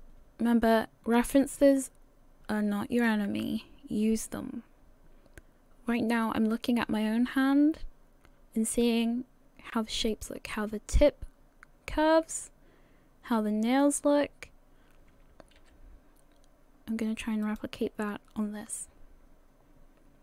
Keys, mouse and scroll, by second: 10.1 right click, 15.6 g.